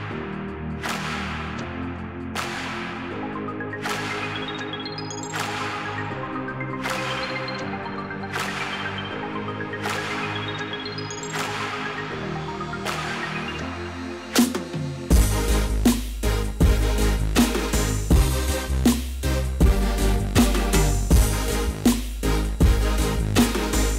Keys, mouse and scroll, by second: 2.2 click, 3.4 click, 5.3 Tab, 5.6 Tab, 6.0 Tab, 6.2 Tab, 6.8-8.4 typing, 12.5-14.3 typing, 12.7 click, 15.3 click, 15.5 click, 17.8 click, 19.2 click, 20.6 click, 21.6-23.8 typing, 23.3 Tab.